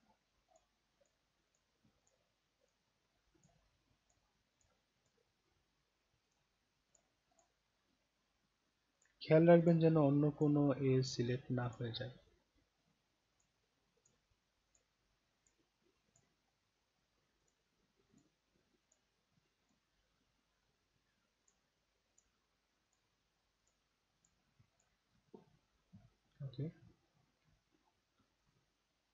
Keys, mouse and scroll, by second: 0.5 shift+click, 1.0 shift+click, 1.5 shift+click, 2.0 shift+click, 2.6 shift+click, 3.3 shift+click, 4.0 shift+click, 4.6 shift+click, 5.0 shift+click, 6.2 shift+click, 6.9 shift+click, 7.3 shift+click, 9.0 shift+click, 9.6 shift+click, 10.4 shift+click, 11.0 shift+click, 11.6 shift+click, 13.3 shift+click, 14.0 shift+click, 14.7 shift+click, 15.4 shift+click, 16.1 shift+click, 17.4 shift+click, 18.1 shift+click, 18.9 shift+click, 19.6 shift+click, 21.4 shift+click, 22.1 shift+click, 22.8 shift+click, 23.6 shift+click, 24.1 shift+click, 24.7 shift+click, 28.4-29.1 alt+drag.